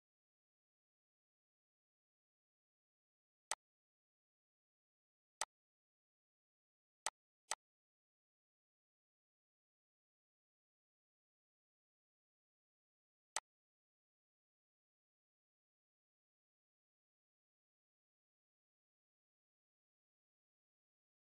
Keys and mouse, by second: 1.7 click, 8.7 click, 10.8 click, 13.1 click, 18.0 click, 19.0 click.